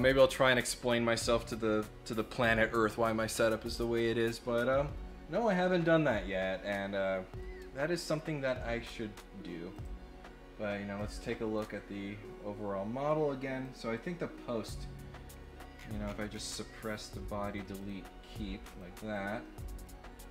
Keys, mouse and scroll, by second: 9.7 click, 10.9 click, 11.5 click, 13.6 click, 14.5 click, 15.7-16.3 scroll down 6, 16.8 click, 17.4 click, 17.7 click, 18.6 click, 19.1 click, 19.4 middle click.